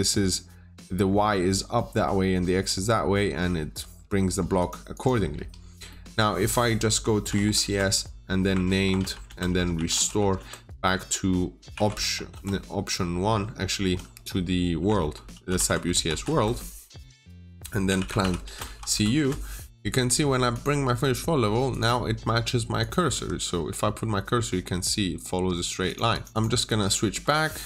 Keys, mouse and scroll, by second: 3.2-4.4 scroll up 1, 4.5 click, 4.8 double click, 5.2 Delete, 5.6 scroll down 1, 5.8 middle click, 7.1 typing, 7.5 Return, 8.6 typing, 9.1 Return, 9.9 typing, 10.2 Return, 11.8-12.2 typing, 13.3-16.1 typing, 15.6 Return, 17.7-18.7 typing, 18.3 Return, 19.1 Return, 20.4 click, 20.8-21.1 scroll up 1, 21.6 click, 23.0 Escape, 25.7 click, 26.0 double click, 26.3 click, 26.5-27.6 scroll down 1.